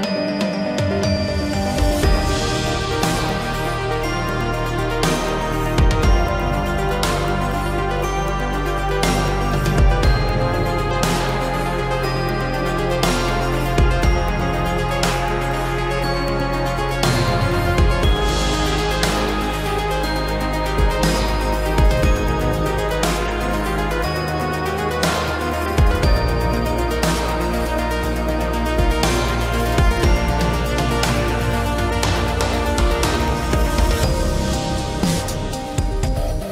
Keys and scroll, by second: 24.7 ctrl+z.